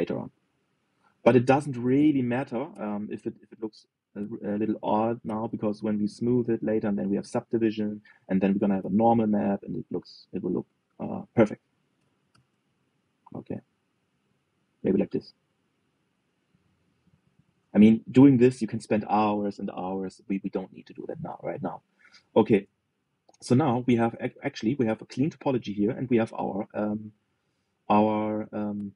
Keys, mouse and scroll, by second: 0.4-2.1 middle drag, 2.1 click, 2.7 g, 5.3 click, 5.6 g, 7.9 click, 8.8 click, 9.1 g, 11.6 click, 12.4 click, 12.6 g, 14.9 click, 15.3-20.8 middle drag, 20.8-21.5 scroll down 4, 21.5-22.5 middle drag, 22.5 scroll down 2, 22.8-27.2 middle drag.